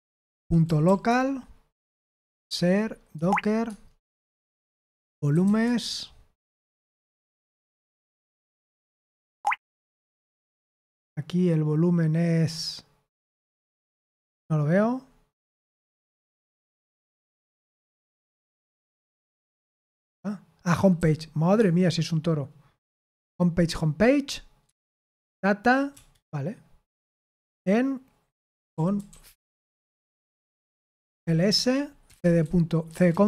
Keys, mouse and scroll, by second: 0.0-1.3 typing, 1.8 Tab, 2.5 Tab, 3.1 Tab, 3.6 Tab, 5.0-5.9 typing, 9.3 Tab, 9.7 Tab, 20.9 typing, 21.5 Tab, 24.6 Tab, 25.9 BackSpace, 27.0 space, 28.1-33.2 typing, 30.2 Return.